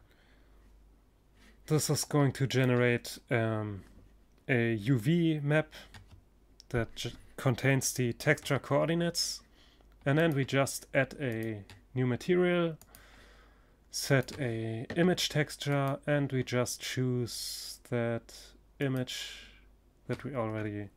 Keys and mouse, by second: 0.9-2.8 drag, 6.8 Tab, 8.6-13.1 drag.